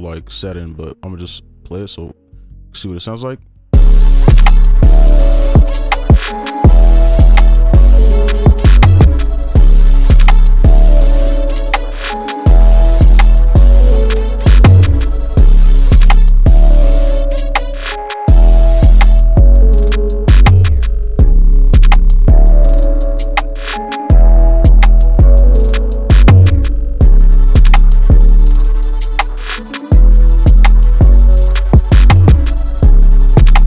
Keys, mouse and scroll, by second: 16.2 double click, 26.0 double click.